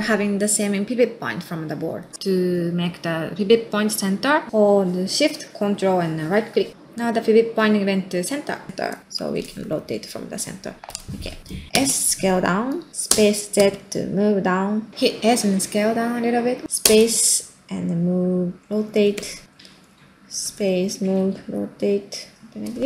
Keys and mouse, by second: 0.2 middle click, 0.6-1.1 middle drag, 1.6 middle click, 6.6 ctrl+shift+click, 7.4 middle click, 8.7 ctrl+middle click, 9.0-13.1 middle drag, 13.1 space, 16.8 space, 20.4 space, 21.1 r.